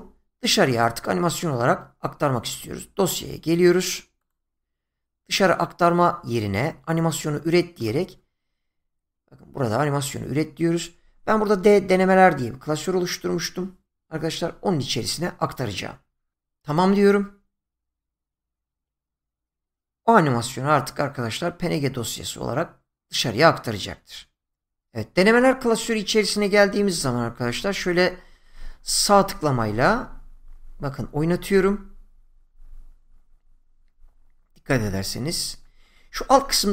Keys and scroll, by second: 28.0 Right, 36.0 Left.